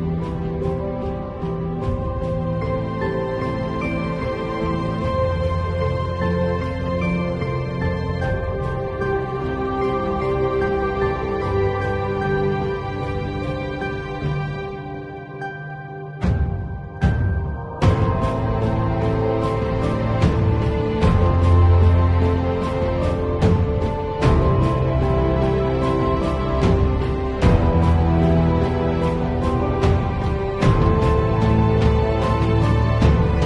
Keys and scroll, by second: 0.2 [, 1.4 0, 6.4 v, 13.2 super+l, 18.8 Return, 19.6 space.